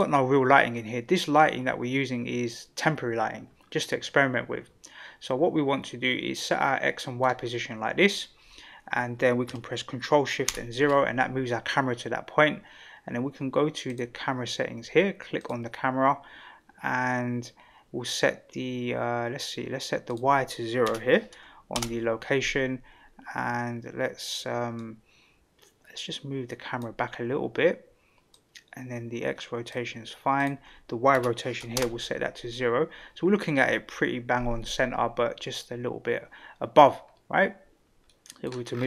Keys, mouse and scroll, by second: 0.0 F12, 3.7-7.2 middle drag, 10.5 ctrl+alt+KP_0, 13.9 click, 15.4 click, 20.0-22.6 drag, 24.8-26.9 drag, 28.3-29.8 drag, 30.4-32.4 drag, 38.1-38.4 middle drag, 38.7-38.8 scroll down 3.